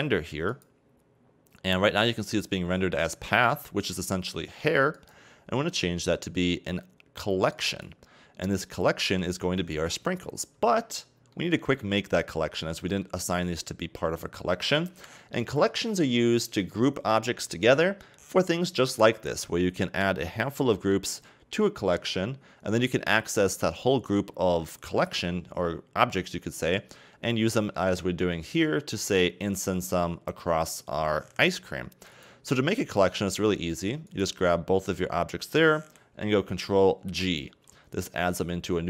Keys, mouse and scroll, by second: 0.5 click, 1.4-4.7 scroll down 4, 4.9-8.0 drag, 11.3-12.4 shift+middle drag, 12.4-13.0 scroll up 1, 13.0-16.0 shift+middle drag, 32.1 right click, 34.1 shift+right click, 37.2 ctrl+g.